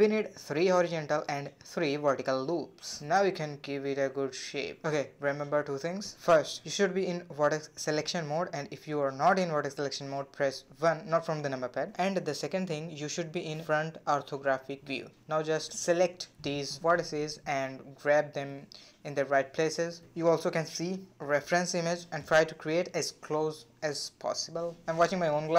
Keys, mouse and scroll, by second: 1.0-1.5 scroll up 1, 1.5-2.8 shift+middle drag, 2.8 1, 3.7-4.3 scroll up 1, 4.3 click, 5.4 g, 8.2 click, 8.4 g, 9.1 click, 9.2 g, 10.5 click, 10.9 g, 11.4 click, 11.5 g, 12.4 click, 12.6 g, 13.6 click, 13.7 g, 14.8 click, 14.9 g, 15.7 click, 16.2 g, 18.2 click, 18.5 g, 19.5 click, 19.7 g, 20.8 click, 20.9 g, 22.9 click, 23.0 g, 23.7 click, 23.9 g, 25.1 click, 25.3 g.